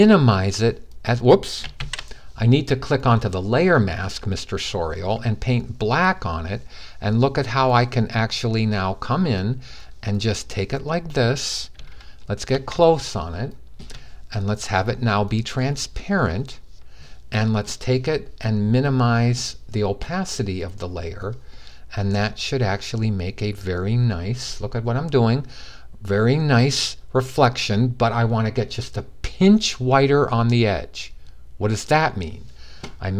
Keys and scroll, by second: 1.5 typing, 1.5 super+z, 3.2 typing, 4.4 typing.